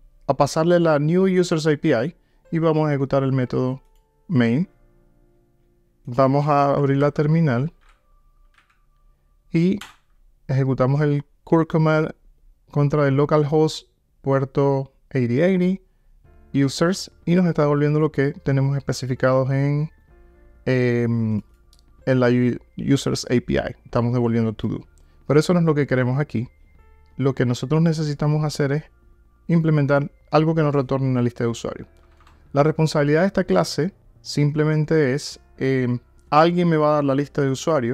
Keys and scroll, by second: 4.1 ctrl+r, 7.1 alt+F12, 27.9 super+F2.